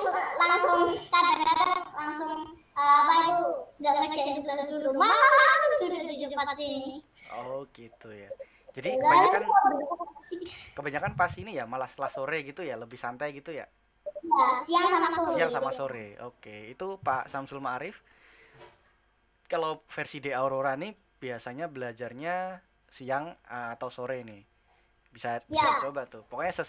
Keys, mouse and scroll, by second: 0.4-26.6 middle drag.